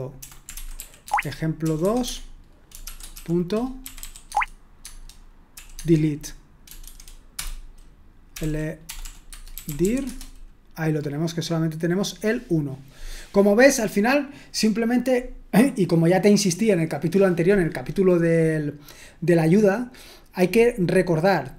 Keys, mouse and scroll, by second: 0.0-5.6 typing, 6.8-10.3 typing.